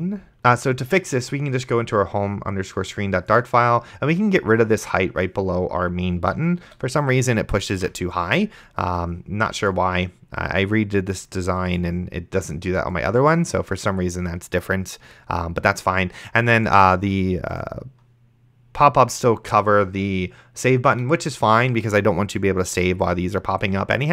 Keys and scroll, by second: 6.9 ctrl+x, 8.0 s.